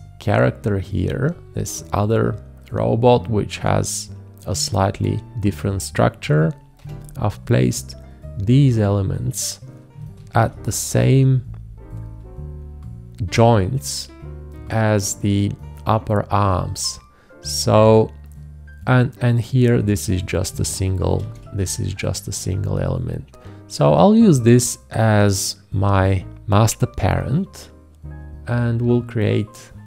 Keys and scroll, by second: 6.8 v, 10.3 ctrl+z, 21.2 ctrl+z.